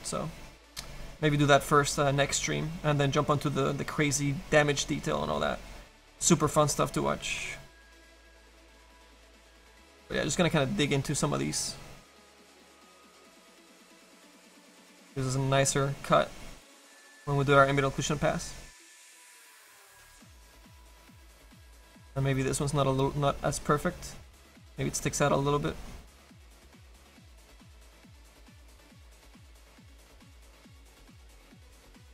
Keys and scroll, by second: 31.1 s.